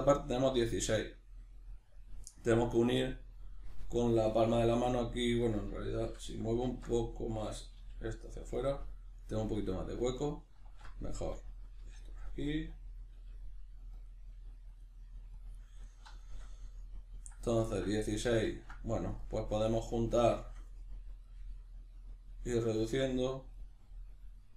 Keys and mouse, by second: 5.4 right click, 6.1 l, 8.6 click, 8.7-10.6 middle drag, 10.6 alt+q, 12.6 click, 13.1 g, 14.0 click, 14.3 g, 14.8 click, 15.0 g, 15.4 click, 15.5-19.0 middle drag, 19.0 right click, 20.4-23.5 shift+middle drag, 23.5 right click, 24.0-24.5 middle drag.